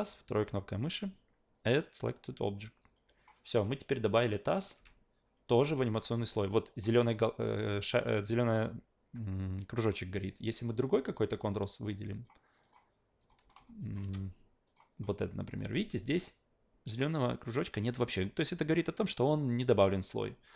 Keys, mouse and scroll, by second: 0.3 right click, 2.8 click, 4.4 click, 4.8 a, 11.0 click, 12.1 click, 12.6 click, 13.2 click, 13.5 alt+middle click, 13.8 alt+click, 14.7 click.